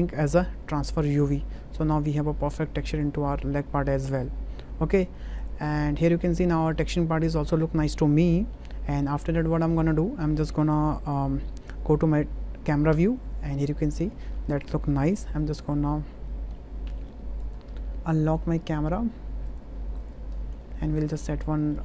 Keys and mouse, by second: 1.9-2.5 middle drag, 2.9 click, 3.5-4.0 middle drag, 4.9 middle drag, 5.4 click, 5.8 middle drag, 6.5 shift+middle click, 6.8-8.5 middle drag, 9.1 middle click, 9.6 shift+middle click, 9.9 middle click, 12.9 KP_0, 16.3 shift+middle click, 16.9 b, 17.6 n, 19.5 click, 20.0 click, 20.3 n, 20.6-21.7 drag.